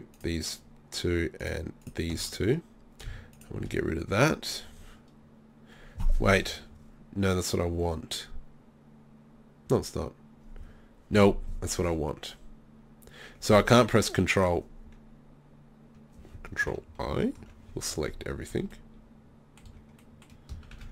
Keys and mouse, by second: 17.0 ctrl+i, 18.5 z, 19.6 z, 20.7 ctrl+z.